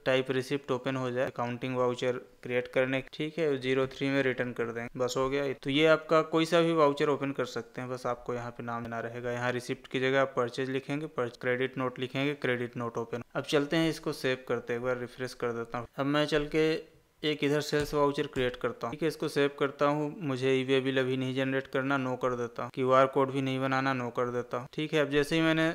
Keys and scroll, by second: 4.8 Tab, 5.5 ctrl+s, 15.8 Escape, 18.9 ctrl+a.